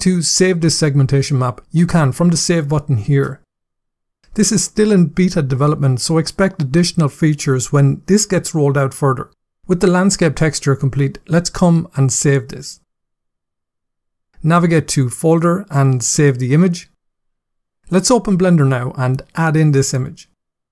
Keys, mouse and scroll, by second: 12.2 click, 16.3 click, 18.9 click.